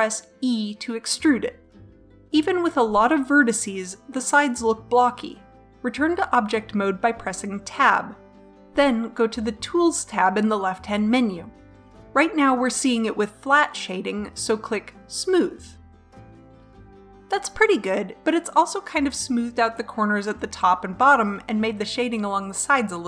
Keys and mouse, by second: 0.3 e, 5.6 Tab, 6.2 middle click, 7.1-8.3 middle drag, 10.5-15.2 drag, 16.2-22.2 drag.